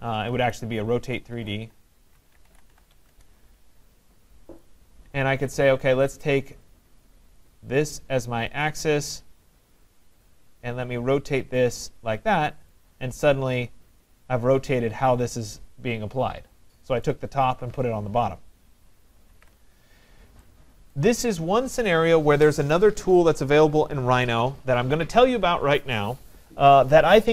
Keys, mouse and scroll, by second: 0.4-3.6 typing, 7.5 click, 7.5 typing, 8.8 click, 10.3 click, 12.7 click, 17.0 right click, 19.3 ctrl+z, 21.0 right click.